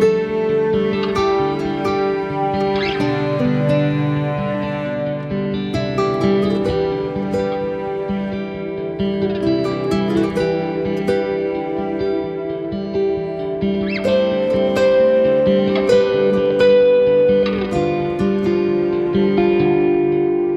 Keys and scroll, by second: 20.0 [, 20.4 [.